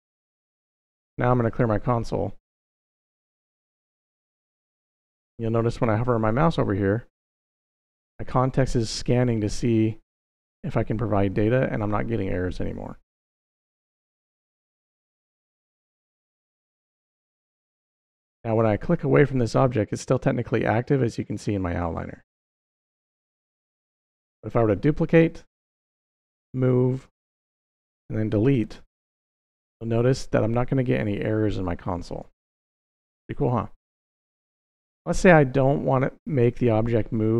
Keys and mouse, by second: 0.7 click, 15.0 middle click, 15.8 click, 17.0 click, 17.7 click, 18.5 click, 22.7 click, 24.4 click, 26.0-27.5 drag, 28.4 x, 35.3 click.